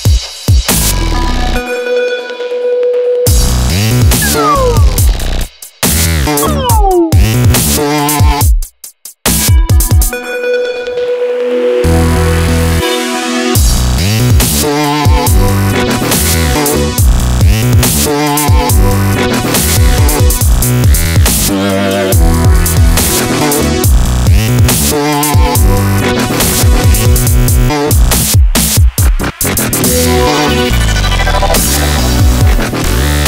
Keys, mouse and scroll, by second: 1.1 a, 1.5-4.3 middle drag, 5.5 a, 6.7 click, 7.4 a, 8.1 Tab, 9.9-11.3 middle drag, 11.3 click, 12.0-13.3 middle drag, 14.6 KP_5, 16.5 shift+a, 18.9-20.6 drag, 20.6 KP_5, 20.8 KP_7, 21.7 s, 23.9-25.2 drag, 25.7-26.8 drag, 27.3 s, 29.3 shift+d, 32.4 shift+d.